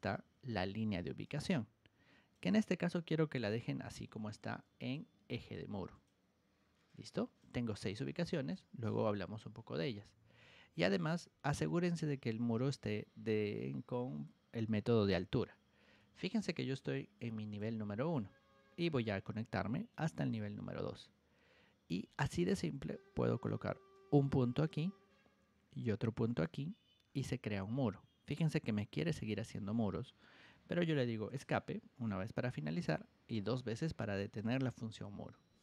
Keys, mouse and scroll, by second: 1.2-2.3 drag, 3.6 Escape, 4.7 click, 5.5 ctrl+1, 5.9 click, 6.8 click, 7.9 click, 8.9 Escape, 10.3 ctrl+1, 10.8 click, 11.5-12.7 ctrl+drag, 14.9 Escape, 15.9 ctrl+1, 16.3 click, 17.1 click, 18.1 Escape, 23.9 click, 26.3 click, 26.9 middle click, 31.2 Escape, 33.4 Escape.